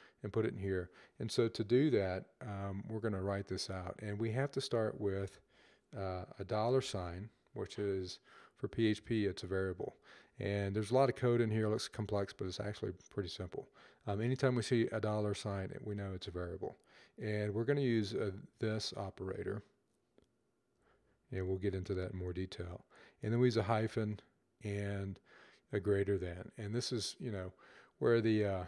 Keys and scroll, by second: 2.5 Left, 3.4 Right, 6.3 typing, 9.2 typing, 16.9-18.4 typing, 20.1-20.8 typing, 23.0-23.4 typing.